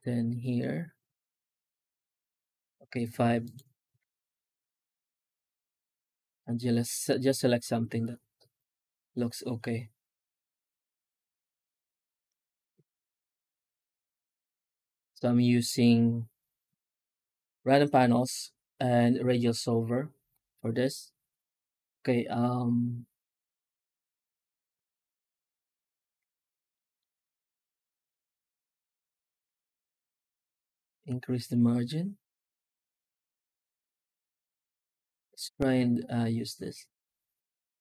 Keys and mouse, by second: 2.3 F9, 26.6 shift+middle click, 29.3 F9.